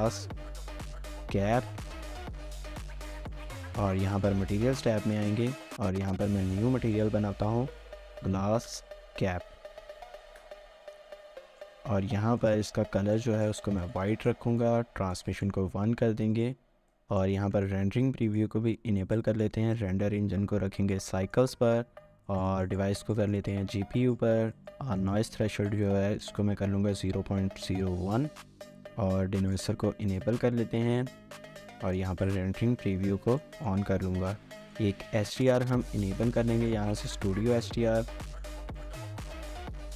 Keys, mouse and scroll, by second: 0.0-2.3 typing, 7.6-10.5 typing, 11.4 middle click, 11.8-14.1 scroll up 1, 14.1 middle click, 25.5-26.5 typing, 27.7-28.5 typing, 33.4 middle click, 37.0 double click.